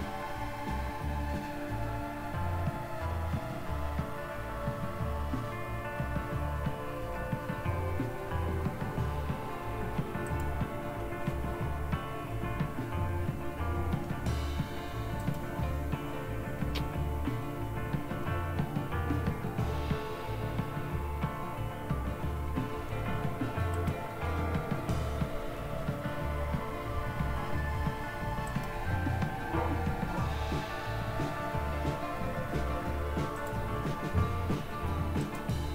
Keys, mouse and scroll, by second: 0.8-2.5 scroll down 1, 2.5-3.9 scroll up 1, 3.9-5.5 scroll up 1, 5.5-7.9 scroll up 1, 7.9-10.3 scroll up 1, 10.3 click, 15.2 click, 23.7 click, 28.5 click, 33.4 click, 35.2 click.